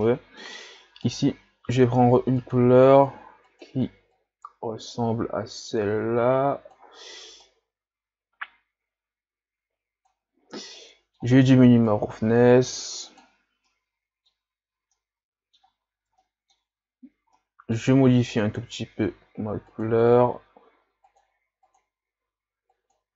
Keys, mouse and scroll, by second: 2.4 click, 12.0-13.8 drag, 13.8-14.5 middle drag, 14.5-14.9 scroll up 1, 14.9-15.9 middle drag, 15.9-16.3 scroll down 3, 16.3-19.9 middle drag, 19.9 click.